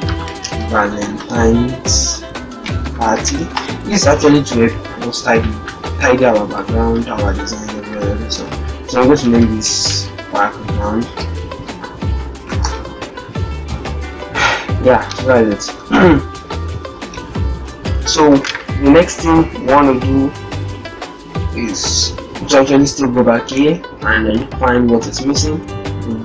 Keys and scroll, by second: 0.1 shift+v, 2.4 shift+p, 7.7 ctrl+shift+g, 9.6 shift+b, 22.2 alt+Tab, 23.2 alt+shift+Tab.